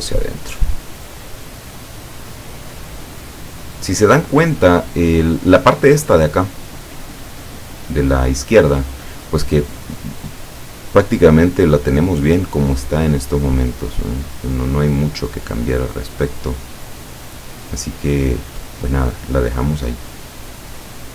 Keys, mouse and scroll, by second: 12.0 click, 12.5 click, 15.0-18.8 drag, 20.1 click, 20.8-21.1 drag.